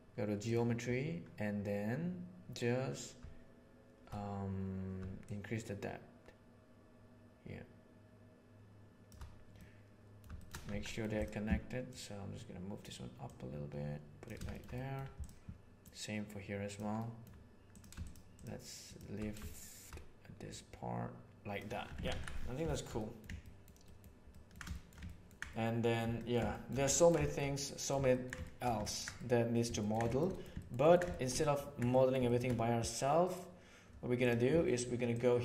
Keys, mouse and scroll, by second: 5.3-9.0 shift+middle drag, 9.5-10.1 middle drag, 10.3 shift+middle click, 10.6 Tab, 10.8 middle click, 11.9 click, 13.2 click, 14.4 shift+middle click, 14.7 middle click, 15.8 click, 16.9 middle click, 20.5-21.5 right drag, 21.8 Tab, 22.0 alt+a, 22.6 shift+middle click, 22.9 middle click, 23.3 ctrl+middle drag, 23.7 ctrl+middle drag, 24.2 ctrl+middle drag, 24.6 shift+middle drag, 25.0 ctrl+middle drag, 25.4-25.8 middle drag, 26.1 ctrl+middle click, 26.5 shift+middle drag, 26.8 ctrl+middle click, 27.1 shift+middle click, 27.5 middle click, 28.0 ctrl+middle click, 28.3 shift+middle click, 28.7 ctrl+middle click, 29.1 middle click, 29.7 ctrl+middle click, 30.0 shift+middle click, 30.2 middle click, 30.5 ctrl+middle click, 30.7 ctrl+middle click, 31.1 shift+middle click, 31.3 ctrl+middle click, 31.8 middle click, 32.2 ctrl+middle click.